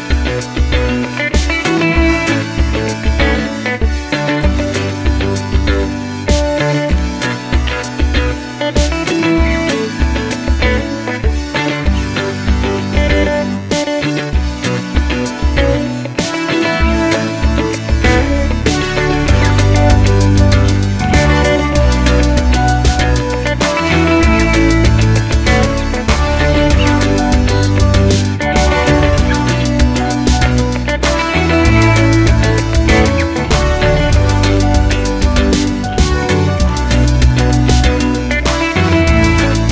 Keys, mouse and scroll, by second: 0.2 middle click, 1.3 KP_7, 1.5-2.2 scroll down 2, 2.2 1, 2.8 shift+a, 4.9 click, 5.6 x, 5.9 alt+click, 6.7 ctrl+click, 7.2 click, 7.5 ctrl+click, 8.2 middle click, 8.7 KP_7, 9.0 shift+middle click, 10.9 g, 12.6-16.2 middle drag, 13.3 scroll up 2, 16.2 ctrl+r, 17.2 middle click, 17.4 2, 17.6 click, 17.9 f, 18.1 click, 18.3 f, 18.8 click, 18.9 middle click, 19.2 click, 19.5 f, 19.6 middle click, 20.6 click, 20.7 shift+click, 20.9 f, 21.0 middle click, 21.5 click, 22.2 f, 22.4 click, 22.6 shift+click, 22.7 f, 22.7 middle click, 23.1 click, 24.1 ctrl+r, 24.5 shift+click, 24.8 f, 24.9 shift+click, 25.2 f, 25.3 shift+click, 25.7 f, 25.8 shift+click, 26.0 f, 26.2 middle click, 26.9 alt+click, 27.6 KP_3, 27.8-28.7 scroll down 1, 28.7 r, 29.4 middle click, 29.6 ctrl+z, 30.0 alt+click, 30.4 e, 37.3 z, 37.4-37.7 scroll up 1, 37.7-39.7 shift+middle drag.